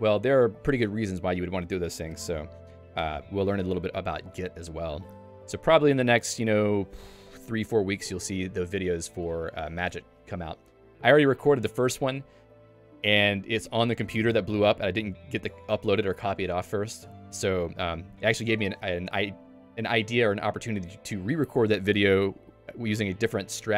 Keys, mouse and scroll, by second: 5.4 click, 20.1 click, 20.8 Escape, 21.3 click.